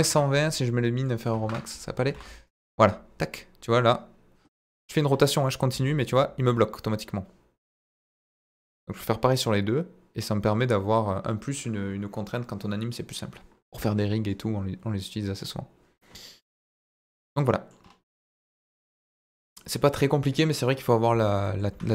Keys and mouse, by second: 1.1 click, 2.0 r, 2.1 z, 4.6 Escape, 5.2 middle click, 5.7 r, 5.7 z, 16.5 click, 17.2-17.7 middle drag, 18.5-19.4 middle drag, 21.4 middle click, 21.7 Tab.